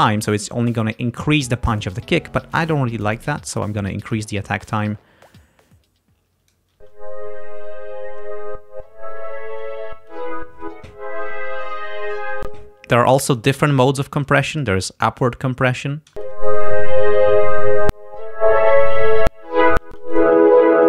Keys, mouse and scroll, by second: 2.6-4.4 drag, 4.9-6.8 drag, 6.8 space, 12.5 space, 13.3 click, 15.3 click, 16.1 space, 19.9 space, 20.2 click.